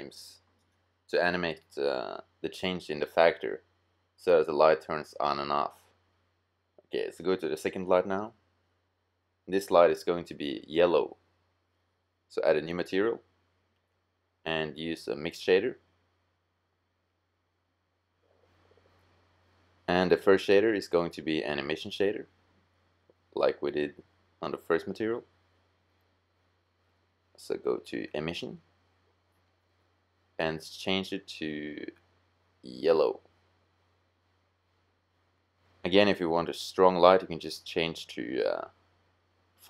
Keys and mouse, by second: 2.2 middle click, 2.9 click, 9.8-12.7 drag, 12.7-17.7 middle drag, 25.5-27.4 middle drag, 29.2-31.1 middle drag, 38.1-39.6 drag.